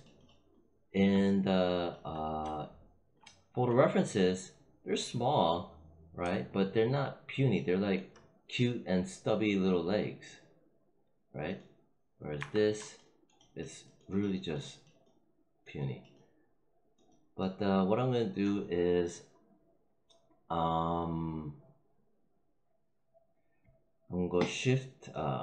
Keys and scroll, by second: 12.3 f.